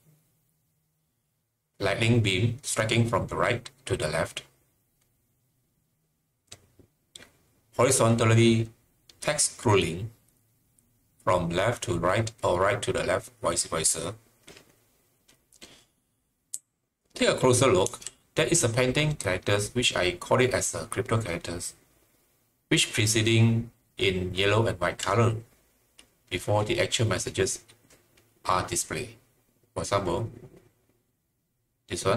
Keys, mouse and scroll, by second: 16.5 typing.